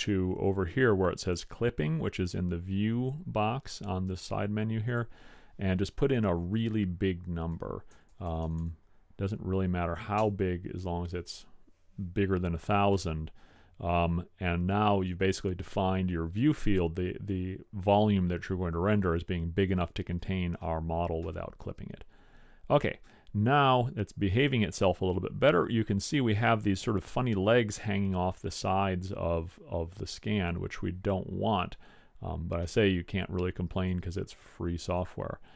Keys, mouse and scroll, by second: 4.9 click, 6.8 middle click, 8.2 KP_0, 8.3 KP_0, 8.7 KP_0, 11.7 click, 14.4-15.0 middle drag, 20.8-23.3 middle drag.